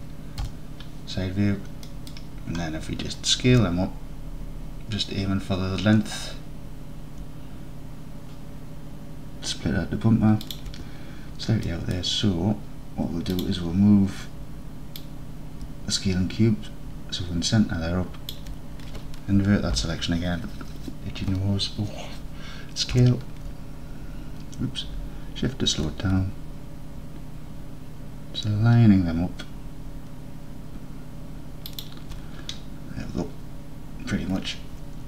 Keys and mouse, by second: 0.5 KP_3, 1.9 drag, 3.6 s, 10.5 shift+click, 11.7 middle click, 11.9 middle click, 13.4 click, 15.1-18.4 drag, 19.8 ctrl+i, 23.0 s, 31.8 shift+click.